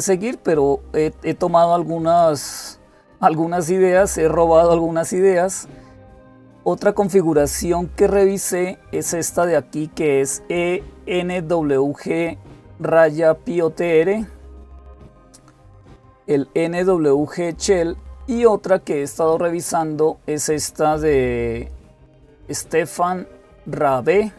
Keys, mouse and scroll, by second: 3.7-4.6 scroll down 2, 8.2 click, 18.9 click.